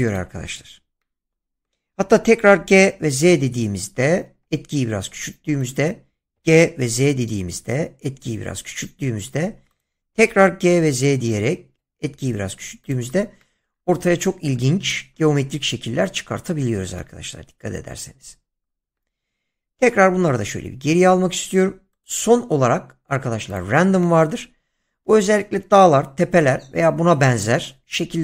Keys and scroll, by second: 0.2 <, 2.5 g, 3.1 z, 6.1-7.3 typing, 10.1-10.6 typing, 19.8 ctrl+z.